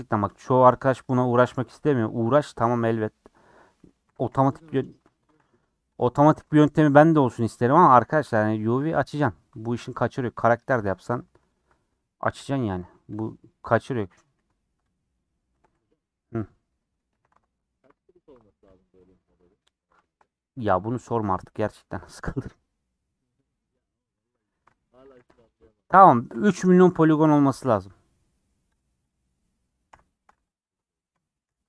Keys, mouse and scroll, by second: 0.3 click, 1.1 click, 1.2 Tab, 1.4 scroll up 1, 2.5 alt+click, 4.1 a, 4.6 u, 5.2 shift+middle click, 5.6 Tab, 6.0 click, 6.1 Tab, 6.7 alt+click, 8.0 alt+click, 8.8 Tab, 9.0 click, 9.2 Tab, 10.1 alt+click, 10.9 a, 11.6 u, 12.4 /, 12.8 Tab, 13.5 click, 14.4 h, 14.9 click, 15.2 click, 15.6 Tab, 16.4-18.7 middle drag, 18.7 alt+click, 19.6 middle click, 20.3-20.7 scroll up 2, 20.7-23.4 shift+middle drag, 23.4 alt+click, 23.8 alt+click, 24.3 alt+click, 25.1 a, 25.6 u, 26.3 /, 26.8 Tab, 26.8 middle click, 27.6 /, 28.1 scroll down 4, 28.3 middle click, 28.8 click, 29.1 click, 29.9 j, 30.5 click, 30.7 Tab, 31.5 /.